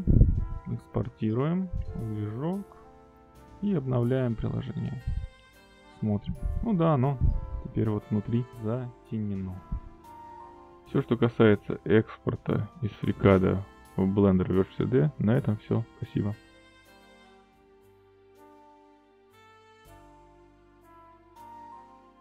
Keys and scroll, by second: 1.2 ctrl+s, 1.6 q, 6.0 ctrl+r.